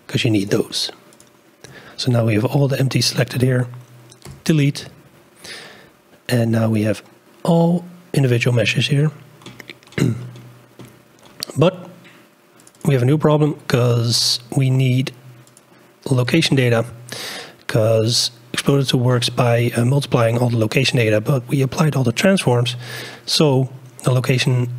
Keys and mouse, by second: 0.4 ctrl+click, 1.1 ctrl+click, 4.7 Delete, 12.6 click, 15.6 click, 18.0 click.